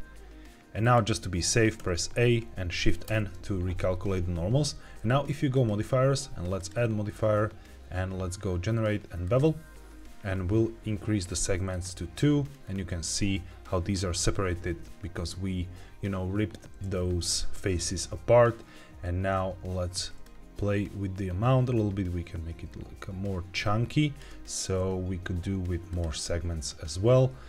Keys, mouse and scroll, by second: 0.7 click, 1.7 a, 3.0 shift+n, 5.4 click, 6.5-9.3 drag, 11.6 click, 12.4 scroll up 2, 14.6-15.8 scroll up 2, 20.1-24.2 shift+drag, 25.8 click.